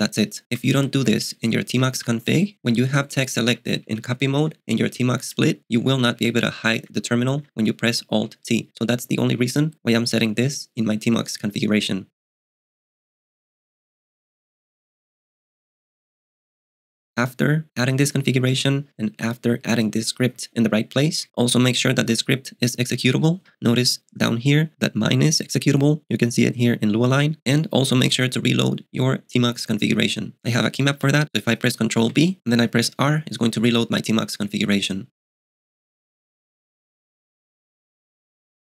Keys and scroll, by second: 0.8 ctrl+u, 1.0 ctrl+d, 1.5 ctrl+d, 1.8 ctrl+u, 2.0 ctrl+u, 2.3 ctrl+d, 2.6 ctrl+u, 2.9 ctrl+d, 3.0 ctrl+d, 3.5 ctrl+u, 3.7 ctrl+d, 3.9 ctrl+d, 4.1 ctrl+d, 4.3 ctrl+u, 4.5 ctrl+u, 4.7 ctrl+d, 4.8 ctrl+d, 4.9 ctrl+d, 5.1 ctrl+u, 5.3 ctrl+u, 5.5 ctrl+d, 5.6 ctrl+d, 5.7 ctrl+u, 5.8 ctrl+u, 5.9 ctrl+u, 6.1 ctrl+d, 6.3 ctrl+d, 6.7 ctrl+u, 6.8 ctrl+u, 7.0 ctrl+d, 7.2 ctrl+d, 7.4 ctrl+u, 7.5 ctrl+u, 7.6 ctrl+d, 9.4 super+Tab, 22.1 super+Tab, 32.1 ctrl+b, 33.7 ⟲.